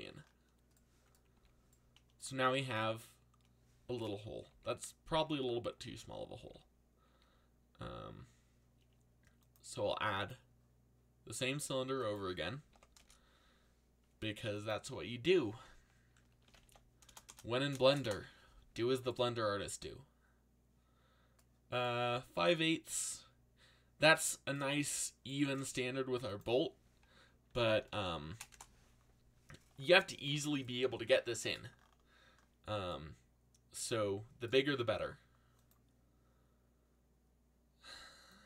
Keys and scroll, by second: 1.3 z, 2.5 a, 4.5 ctrl+z, 5.8 ctrl+z, 6.3 ctrl+z, 12.3-13.2 typing, 16.1-17.9 typing, 18.0 Return, 27.2-28.3 typing, 28.5 Return.